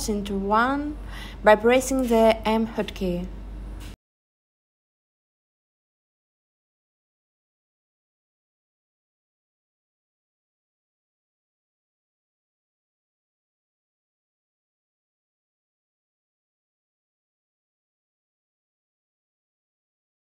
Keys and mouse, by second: 2.1 s, 2.5 y, 2.8 0, 3.6 Return, 4.0 super+z, 5.4 e, 6.5 click, 7.1 s, 8.8 click, 10.1 s, 10.5 y, 10.8 0, 11.2 Return, 12.0 e, 13.2 s, 14.7 click, 15.4 e, 17.3 click, 17.7 s, 18.9 click.